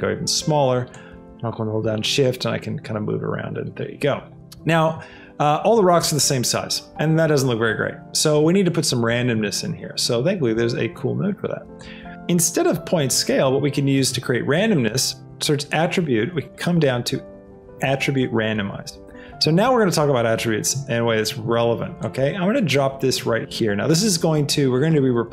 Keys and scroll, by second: 13.9 shift+a.